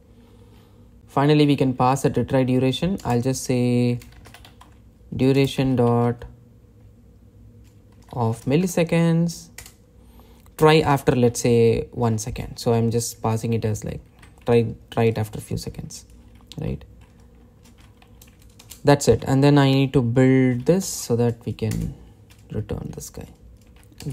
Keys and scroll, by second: 3.7 Return, 10.3 Return, 22.5 Return.